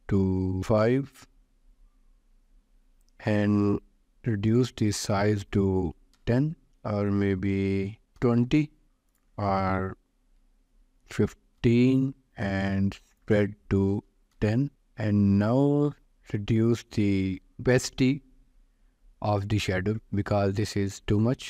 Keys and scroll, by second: 0.6 5, 0.8 Return, 5.8 0, 6.2 Return, 8.0 0, 8.2 Return, 10.5 1, 11.0 5, 11.5 Return, 13.8 1, 14.2 0, 14.4 Return.